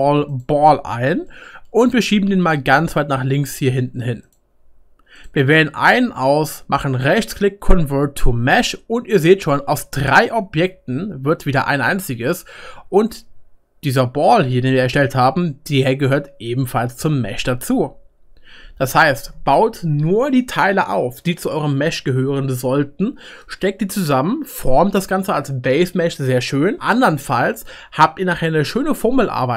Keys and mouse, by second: 0.5-2.7 drag, 2.0 g, 2.7-29.5 right drag.